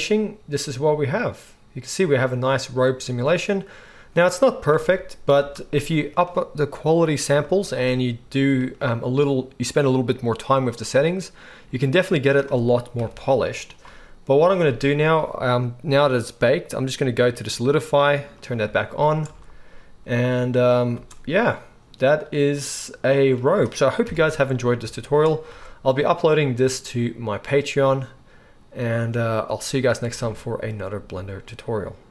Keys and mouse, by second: 4.8 alt+a, 5.4 space, 13.0 shift+Left, 14.4-16.0 middle drag, 16.1 click, 18.2 click, 19.2 space, 21.0 space, 24.0 KP_1, 25.5 space, 27.0-28.5 middle drag, 30.2 alt+a, 30.2-32.1 alt+middle drag.